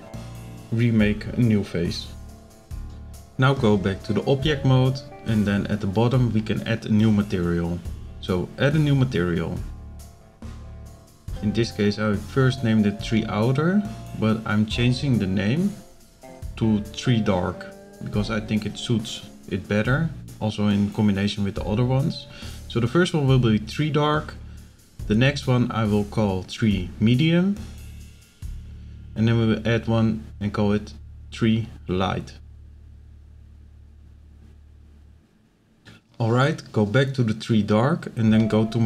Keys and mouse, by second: 0.0-0.6 drag, 6.4 click, 8.2 click, 8.9 click, 9.5 click, 9.7-13.8 drag, 10.9 e, 17.9 click, 18.3 click, 18.5-21.9 drag, 20.0 BackSpace, 22.2 click, 23.0 click, 23.9 click, 24.0-27.8 drag, 25.2 e, 28.3 click, 29.1 click, 29.2 click, 30.5 click, 31.0 click, 31.3-34.6 drag, 32.3 e, 35.4 click, 36.2 z, 38.0-38.3 middle drag, 38.6 shift+middle drag.